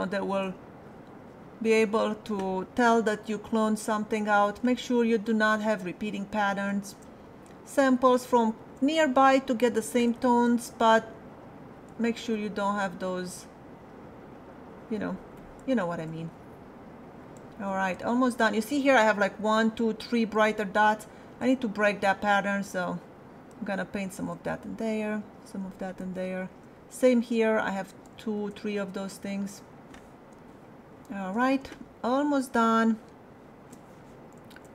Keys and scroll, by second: 30.3 space, 31.6 space.